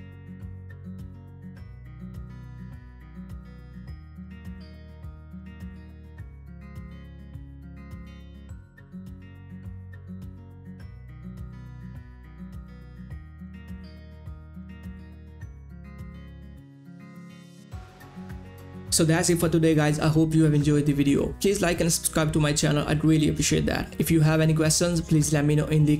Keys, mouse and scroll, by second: 0.7 ctrl+s, 3.1 click, 7.4 click, 8.4 click.